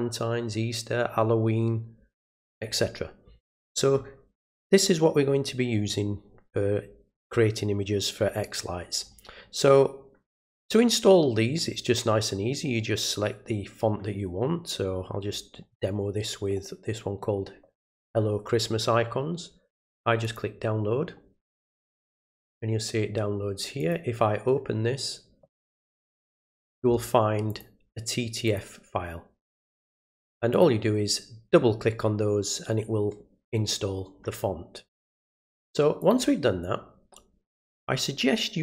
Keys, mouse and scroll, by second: 2.6 scroll down 2, 9.0 middle click, 9.0 scroll down 1, 14.9 middle click, 14.9 scroll down 1, 20.2 click, 23.8 click, 27.5 click, 28.4 click, 29.4 click, 30.5 click, 36.0 click.